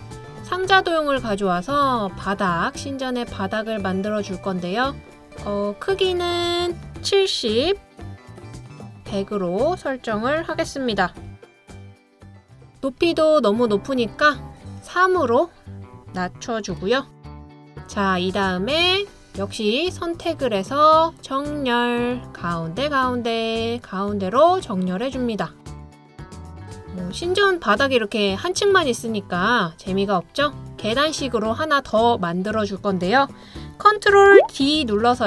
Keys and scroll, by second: 7.7-8.1 typing, 9.4-10.8 typing, 11.8 typing, 16.2-16.7 typing, 34.8 super+d.